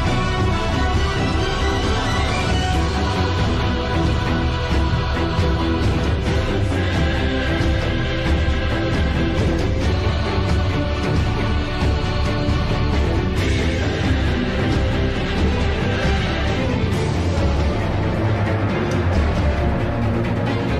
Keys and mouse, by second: 0.9 g, 5.4 g, 10.7 g, 19.8 click.